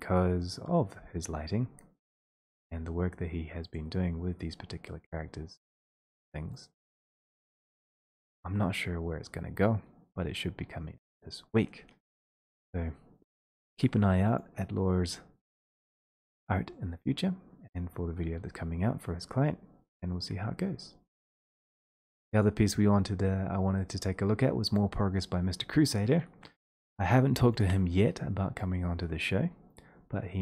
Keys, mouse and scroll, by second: 2.7 click, 3.8 click, 6.7 click, 7.5 click, 14.4 click, 22.4 click, 26.2 click, 27.1 shift+click.